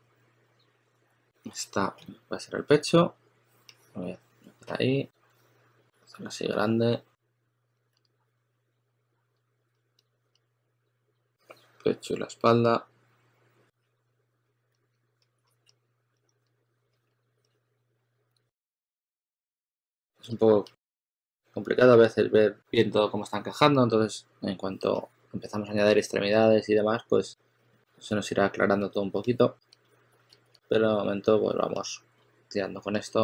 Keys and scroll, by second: 1.4-1.9 typing, 5.1 2, 7.8 s, 10.2 2, 14.6-17.5 typing, 18.8 s, 19.8 s, 20.1 s, 21.1 s, 26.6-28.2 typing, 29.4-30.9 typing.